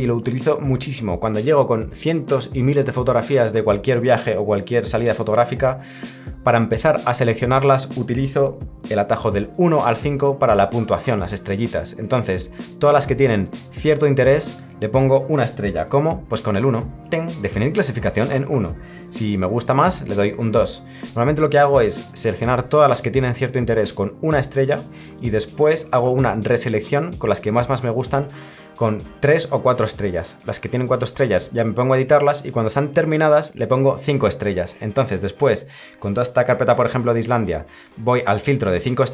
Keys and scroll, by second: 20.3 2.